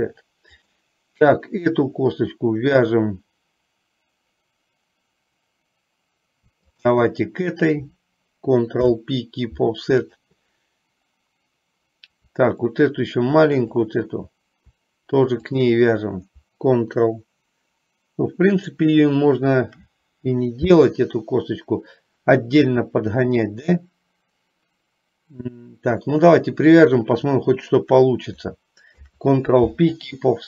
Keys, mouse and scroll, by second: 0.7 click, 8.9 ctrl+p, 15.5 shift+click, 29.2 ctrl+p.